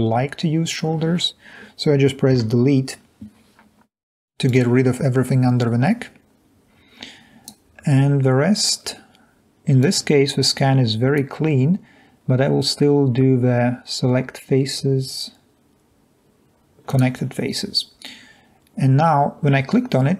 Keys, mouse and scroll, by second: 2.4 Delete, 6.6-7.6 drag.